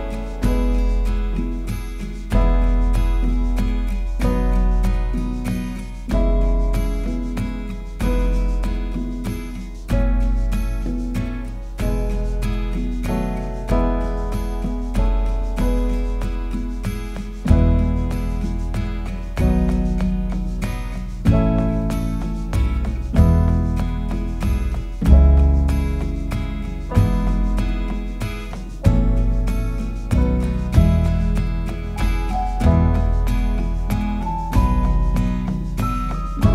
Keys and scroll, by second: 19.4 shift+u, 22.1 alt+space, 23.6-29.2 typing, 26.5 Left, 34.3 super+v, 35.1 super+a.